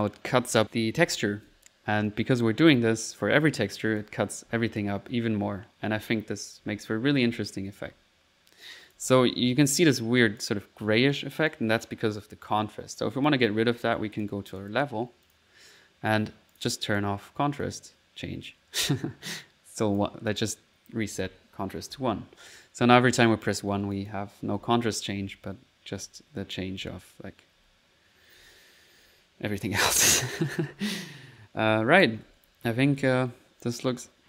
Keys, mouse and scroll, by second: 0.0-1.5 typing, 2.2 middle click, 3.9 click, 4.5-7.9 typing, 8.7 click, 9.1 typing, 10.2 click, 11.2 click, 11.7 click, 14.2 click, 15.3 click, 15.9 typing, 16.1 click, 16.9-18.3 drag, 18.0 middle click, 19.0 middle click, 19.0 typing, 19.8 click, 20.9-29.6 typing, 23.3 click, 23.7 click, 24.0 click, 31.7 typing, 33.0-34.0 typing, 33.7 click.